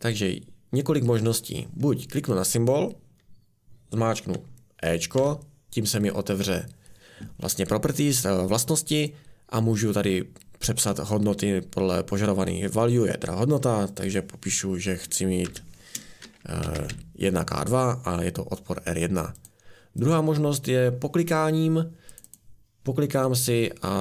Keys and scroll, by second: 5.2 typing, 15.5-17.4 typing.